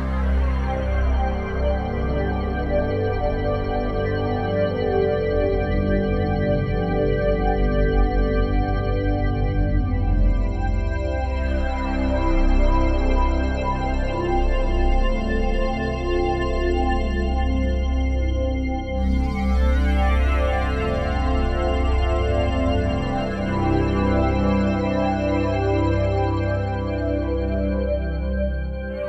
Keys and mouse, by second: 0.9-1.6 typing, 2.7 click, 3.0 click, 3.2 click, 3.9 click, 4.1 click, 6.9-11.9 drag, 13.0 click, 14.6-17.0 drag, 18.0 click, 19.6-25.7 drag, 26.7 click.